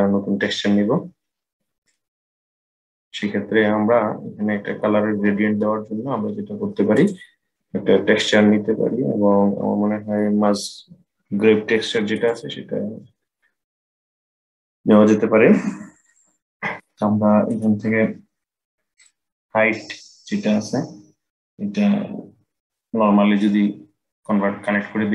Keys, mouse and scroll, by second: 0.8-1.6 scroll up 5, 1.6-4.7 middle drag, 6.7-9.8 drag, 18.8-22.0 drag.